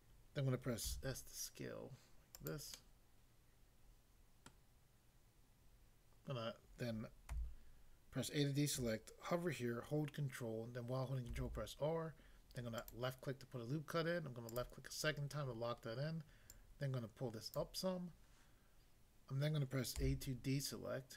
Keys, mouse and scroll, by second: 0.9 s, 2.4 click, 2.8 middle click, 4.5 middle click, 7.4 a, 11.3 ctrl+r, 12.8 click, 14.5 click, 16.5 click, 17.6 click, 19.9 a.